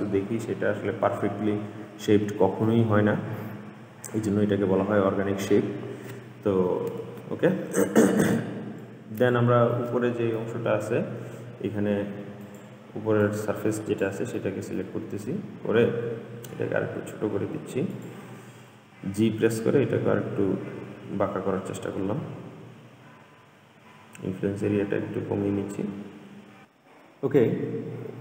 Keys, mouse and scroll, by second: 2.2-2.8 scroll down 1, 2.8-5.8 middle drag, 7.0 Tab, 9.0 click, 9.9-12.6 middle drag, 12.6 click, 14.5 middle click, 15.5-16.6 scroll up 2, 16.6 s, 19.3 g, 28.0 click.